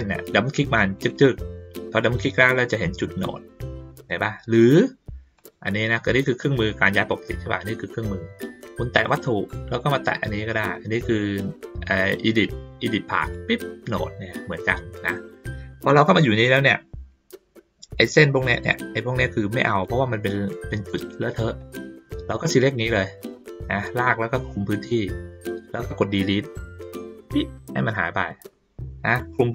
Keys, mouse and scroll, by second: 1.0 click, 1.1 click, 5.3 click, 7.0 click, 8.9 click, 13.2 click, 17.9 click, 19.5 click, 20.3 ctrl+middle click, 20.3-20.7 ctrl+scroll up 1, 20.7 ctrl+scroll down 1, 22.4-24.2 drag, 29.1-29.5 drag.